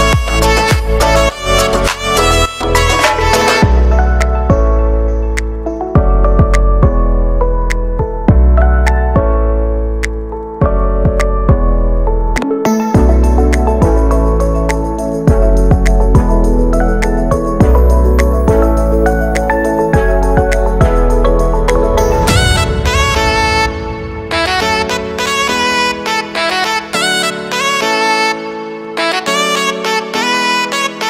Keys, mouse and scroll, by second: 0.4 s, 4.2 middle click, 4.8-5.4 scroll up 1, 5.4-6.6 drag, 6.6 right click, 6.8 middle click, 7.0 scroll up 1, 7.2 g, 10.4 middle click, 10.7 a, 11.0 s, 14.9-16.3 middle drag, 16.3 scroll down 1, 17.5 right click, 17.8 y, 18.9 right click, 19.1 y, 19.5 middle click, 20.0 right click, 20.6 y, 21.2 middle click, 21.7 right click, 22.0 x, 22.9 right click, 23.1 x, 23.6 right click, 23.8 x, 24.3-25.7 middle drag, 26.9 ctrl+r, 30.1-30.6 scroll up 2, 30.2 shift+middle click, 30.6 ctrl+b.